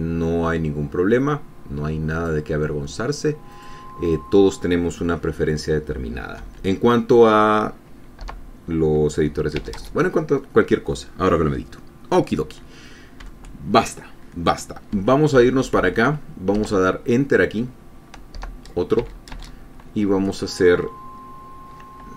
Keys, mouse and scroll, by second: 3.9 click, 6.8 End, 8.6 Return, 10.0 space, 13.6 Up, 15.3 End, 15.8 Left, 17.0 Return, 18.8 Return, 19.4 space.